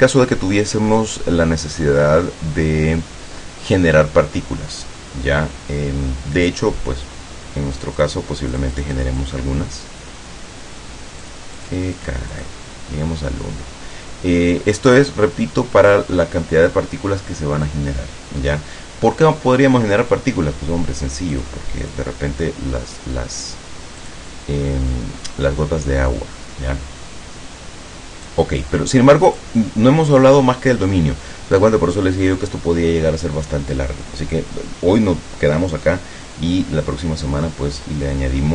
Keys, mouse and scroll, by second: 7.8 click, 8.6 click, 11.3 click, 21.4 click, 21.9 click, 24.1 click, 24.6-25.0 scroll up 2, 25.2-25.6 scroll up 2, 28.4-29.7 drag.